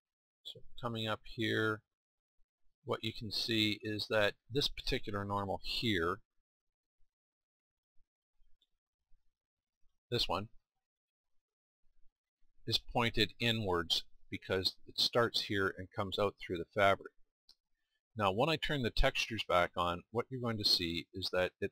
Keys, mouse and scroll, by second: 5.8-7.8 drag, 7.8-10.4 middle drag, 10.4-17.5 drag, 17.5-18.7 middle drag.